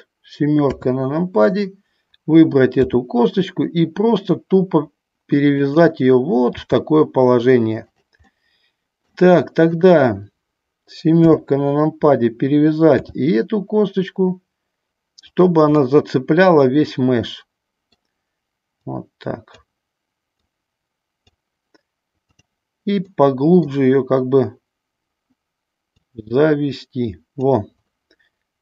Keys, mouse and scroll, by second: 0.9 KP_7, 3.1 r, 5.8 click, 6.8 g, 8.5 middle click, 11.4 KP_7, 13.1 r, 15.4 click, 16.0-18.2 middle drag, 19.1 click, 20.6 click, 22.5 click, 23.3 middle click, 26.1-27.5 drag.